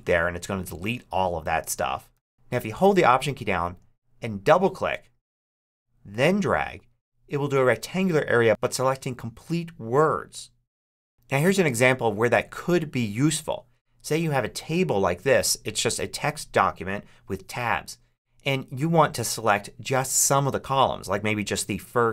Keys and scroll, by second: 2.0 super+z.